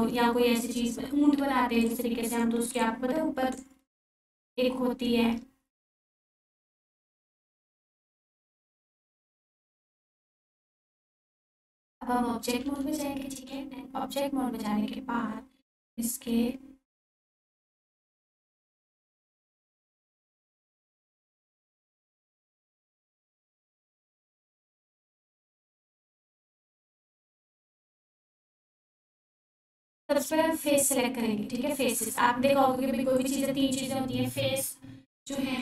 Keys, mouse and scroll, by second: 6.6-6.9 scroll down 1, 7.0-7.6 alt+drag, 12.8 1, 17.2 click, 21.5 click, 22.6 Tab, 23.4-24.7 scroll up 1, 24.9-25.8 alt+shift+drag, 33.1 click.